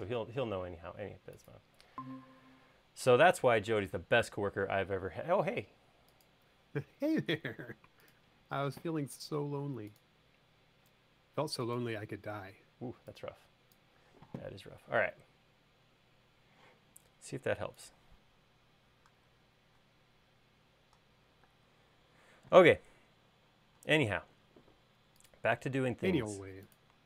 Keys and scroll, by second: 21.9 space.